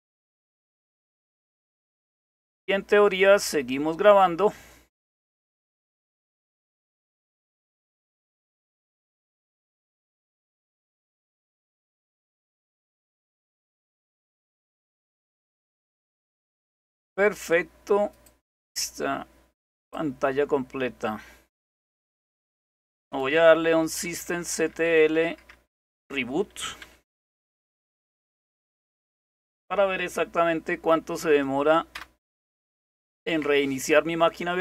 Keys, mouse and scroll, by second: 0.0-2.7 drag, 3.5 click, 7.5 click, 9.3 click, 10.8 click, 11.4 click, 15.4 click, 18.2 click, 19.8 click, 22.2 click, 24.0-28.4 typing, 29.5 typing, 31.9 Return.